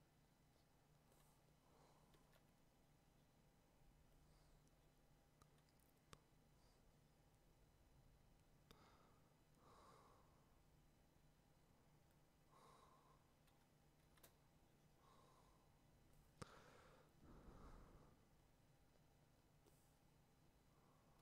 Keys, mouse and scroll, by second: 2.1 [, 14.0 x, 21.1 click.